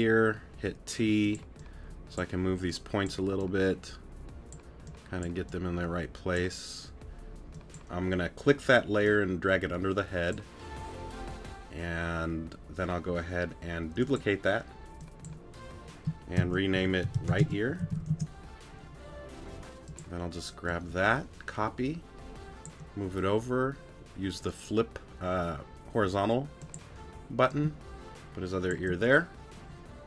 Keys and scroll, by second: 1.0 t.